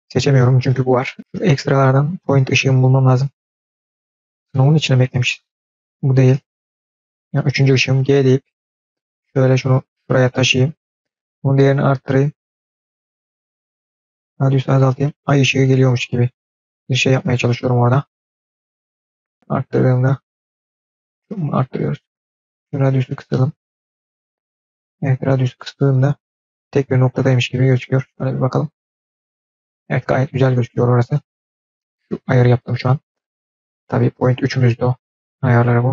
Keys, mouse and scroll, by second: 1.3 click, 3.3 click, 4.3-5.1 drag, 5.9-6.5 scroll down 2, 6.5 click, 8.3 g, 10.9-12.2 drag, 12.6 click, 13.7 click, 14.0-15.8 drag, 16.9 click, 18.2 g, 19.2-21.7 drag, 22.3 click, 22.6-24.3 drag, 25.6 click, 27.6 click, 34.0 drag, 35.7 click.